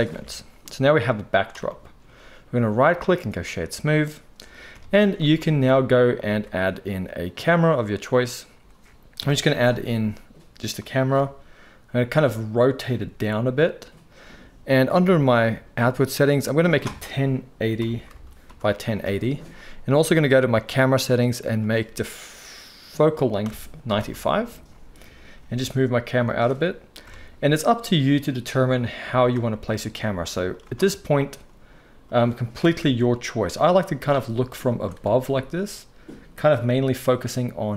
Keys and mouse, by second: 0.1 Tab, 2.7-5.2 right drag, 4.7 KP_1, 5.2-9.2 shift+drag, 6.2 shift+a, 9.2 right click, 9.2 KP_3, 9.2-12.2 drag, 10.0 g, 11.2 r, 12.2-31.3 right drag, 13.0 g, 15.4 click, 15.4 middle click, 16.6-20.5 drag, 16.6-20.5 middle drag, 21.5-26.3 drag, 21.5-26.3 middle drag, 25.4 g, 27.0 KP_0, 28.5 g, 29.4 g, 31.3-33.7 middle drag, 32.6 r, 33.7-36.3 right drag, 33.8 r, 34.9 r, 36.3-37.7 drag, 36.7 g.